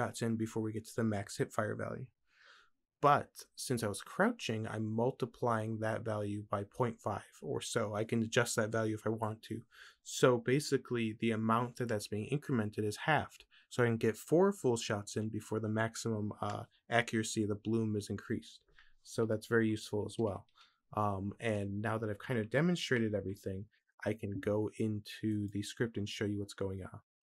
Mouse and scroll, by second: 25.4-27.3 drag, 25.4-27.3 right drag.